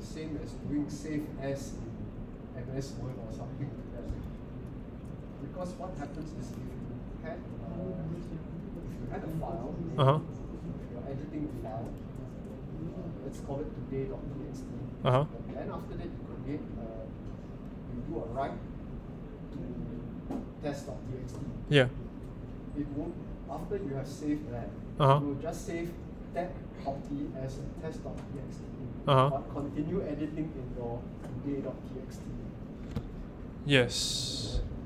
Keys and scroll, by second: 4.0 Up.